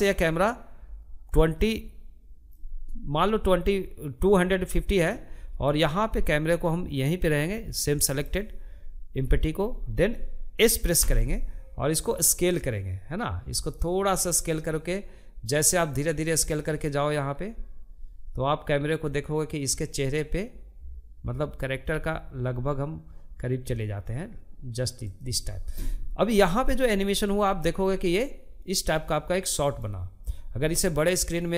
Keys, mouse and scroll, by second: 5.1-9.4 middle drag, 9.4 s, 25.7-28.6 drag, 30.0-31.5 drag.